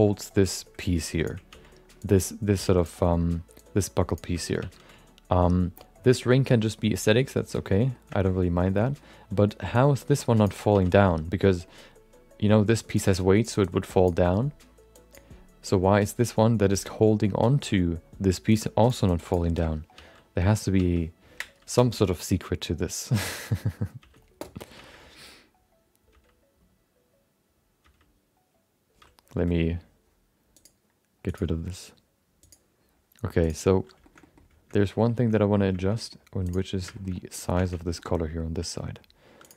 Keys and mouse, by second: 3.2 ctrl+z, 3.5 click, 6.1 ctrl+z, 6.3 middle click, 7.1 middle click, 7.7 middle click, 8.1 middle click, 8.3 middle click, 8.7 middle click, 8.9 middle click, 9.7-12.2 drag, 12.1 ctrl+z, 12.2 middle click, 12.9-14.3 drag, 14.9 click, 18.5-24.4 drag, 21.4 ctrl+z, 22.9 ctrl+z, 24.4 ctrl+z, 25.9 ctrl+z, 27.3 ctrl+z, 30.4 ctrl+z, 30.7 click, 32.5 click, 33.4 click, 34.0 shift+middle click, 34.2 middle click, 34.7 middle click, 35.1 shift+middle click, 35.3 middle click, 35.7 shift+middle click, 35.9 middle click, 36.9 shift+middle click, 37.1 middle click, 37.6 Tab, 37.9 shift+middle click, 38.1 middle click, 38.7 middle click, 39.4 click.